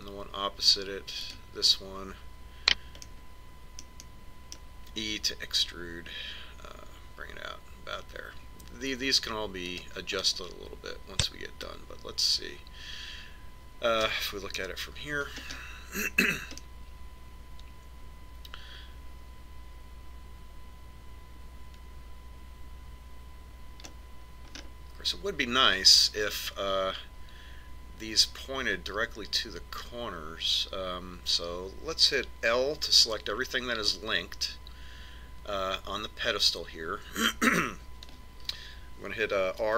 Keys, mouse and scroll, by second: 0.2-1.9 middle drag, 2.6 right click, 4.4-7.1 middle drag, 6.3 e, 11.7-13.6 middle drag, 16.0 KP_1, 16.9-20.0 middle drag, 25.5-27.9 middle drag, 34.6 l.